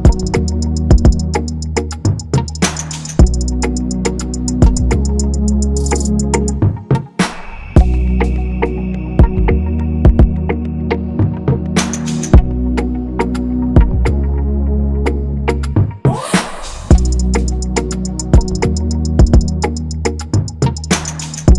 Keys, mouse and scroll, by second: 3.4-4.2 typing.